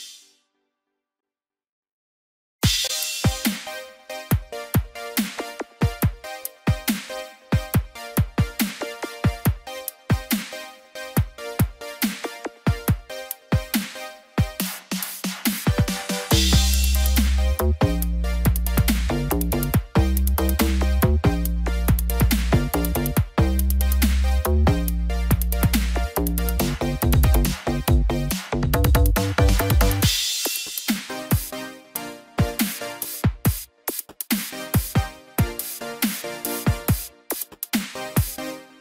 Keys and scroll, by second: 5.7 ctrl+0.